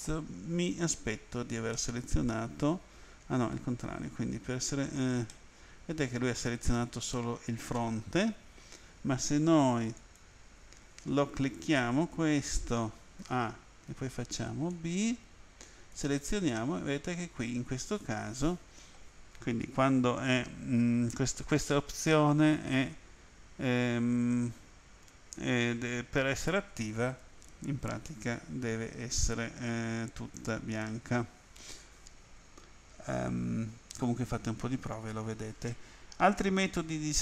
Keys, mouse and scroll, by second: 1.8 middle click, 5.3 middle click, 8.3 End, 10.0 click, 13.2 a, 13.9 b, 14.7 click, 16.6 middle click, 36.4 End.